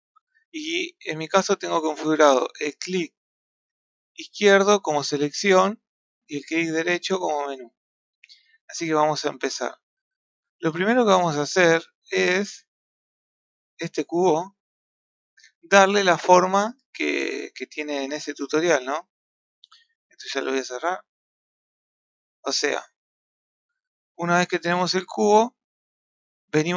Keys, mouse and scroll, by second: 1.3-3.5 middle drag, 3.5 click, 4.9 click, 5.7 click, 6.5-9.5 right drag, 9.5 n, 9.9 n, 11.0 click, 13.1-17.6 middle drag, 21.9-23.2 middle drag.